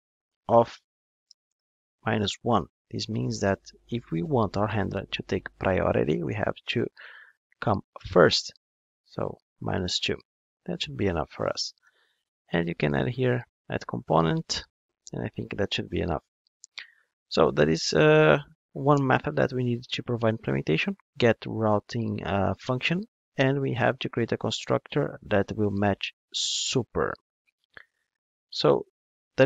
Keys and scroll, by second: 0.8 Return, 12.9 Return, 19.0 alt+Return, 24.2 alt+Return.